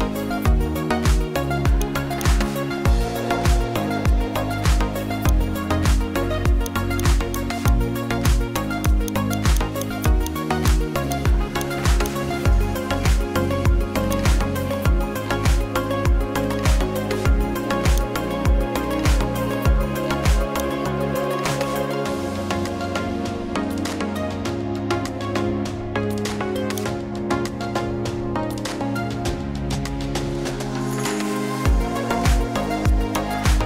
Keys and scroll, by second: 14.9 Down, 15.6 Down, 15.9 Down, 16.1 Down, 19.2 Down, 19.4 Down.